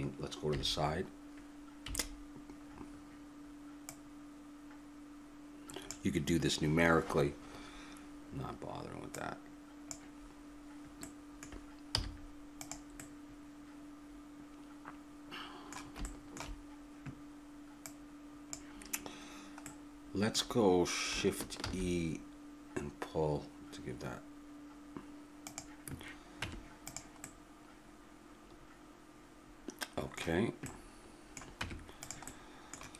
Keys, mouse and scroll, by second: 0.5 KP_3, 1.8 KP_Decimal, 2.8-3.9 middle drag, 3.9-5.8 drag, 9.1-10.9 drag, 10.9-15.2 middle drag, 12.0 z, 16.0-17.3 middle drag, 17.8-19.8 drag, 19.8-21.6 middle drag, 21.6 shift+e, 26.4 Tab, 27.2-29.2 middle drag, 30.6-32.4 middle drag, 31.6 Tab.